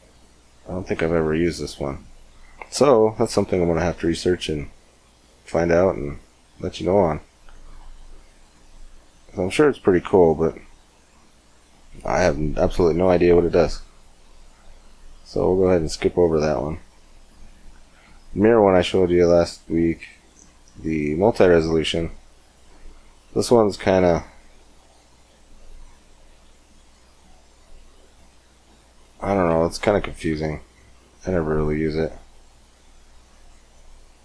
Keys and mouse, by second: 1.2 KP_5, 6.4-12.5 drag, 12.5-15.5 middle drag, 15.5-18.1 drag, 18.1-20.7 middle drag, 23.8-28.4 drag, 28.4-32.0 middle drag, 32.0 click, 32.7-34.2 drag.